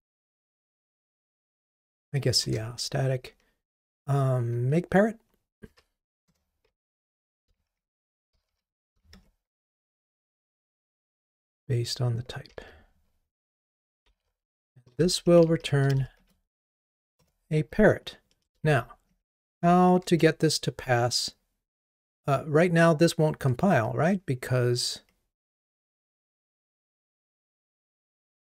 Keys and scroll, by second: 2.5 Return, 12.7 super+c, 17.3 Return.